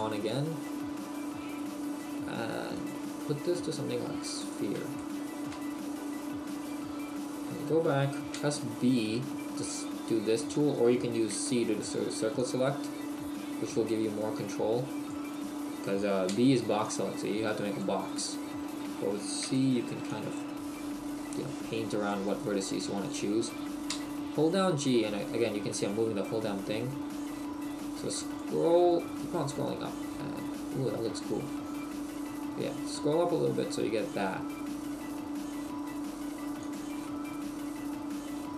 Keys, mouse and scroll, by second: 0.6 middle click, 1.5-2.0 scroll down 1, 2.8 click, 4.9 shift+middle click, 6.5 middle click, 8.4 b, 10.5 right click, 11.4 c, 15.4 right click, 16.3 b, 22.4 right click, 23.9 g, 36.7 click, 37.1 middle click.